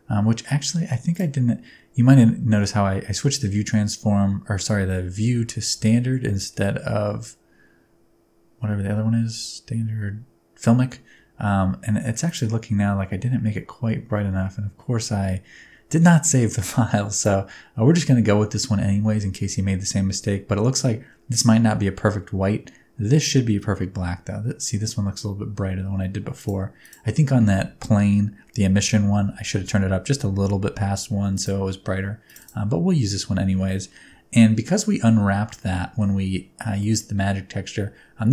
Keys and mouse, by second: 34.8 middle click, 35.6 shift+middle click, 37.0 middle click.